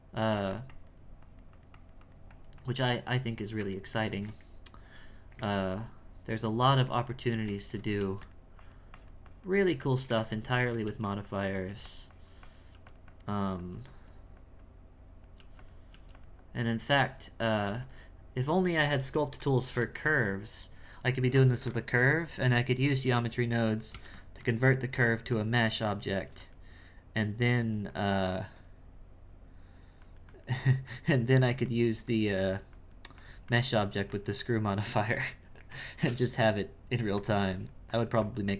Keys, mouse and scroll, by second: 0.7-3.8 drag, 3.8-8.0 ctrl+middle drag, 8.0 f, 8.6-10.8 drag, 11.2 click, 12.1 click, 13.1-15.4 drag, 15.9 f, 16.4-17.6 drag, 18.1-21.2 drag, 24.4-26.1 drag, 27.2-35.3 drag, 35.3-37.0 shift+middle drag, 37.5-38.5 drag.